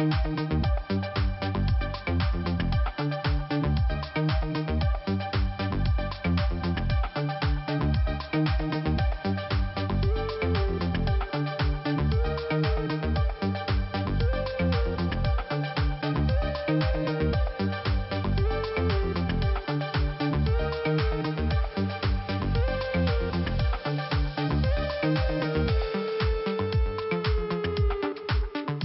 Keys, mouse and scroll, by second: 1.1 click, 2.0 right click, 3.0 click, 5.0 click, 5.3 click, 5.4 click, 5.6 right click, 5.7 right click, 6.8 click, 6.9 click, 8.6 click, 8.7 click, 9.0 right click, 9.2 double right click, 11.5 click, 11.6 click, 13.2 click, 13.9 click, 14.0 click, 16.0 click, 19.1 scroll up 1, 20.2 click, 20.2 click, 20.8 click, 22.1 click, 24.3 click, 24.8 click, 25.6 click, 26.1 click, 27.4 click.